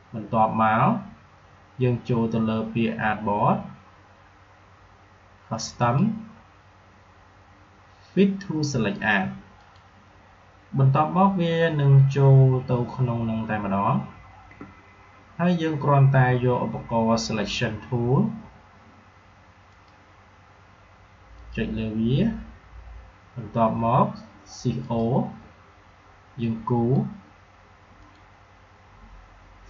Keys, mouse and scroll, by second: 5.7 click, 9.5 click, 19.6 click, 24.7-27.9 drag.